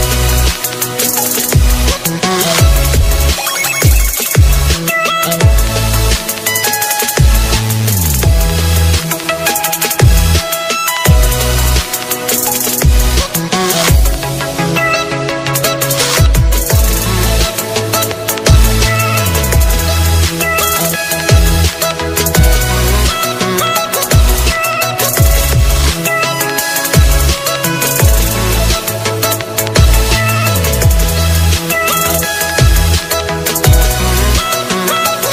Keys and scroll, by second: 24.0 ctrl+alt+z, 31.5 ctrl+alt+z.